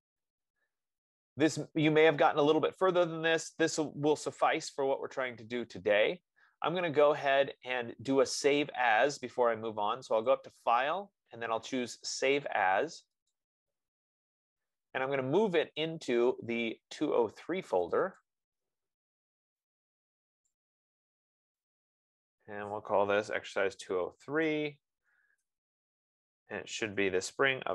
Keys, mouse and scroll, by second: 10.7 click, 13.7 click, 16.1 click, 18.7 click, 20.1 click, 22.5 click, 23.6-27.7 typing.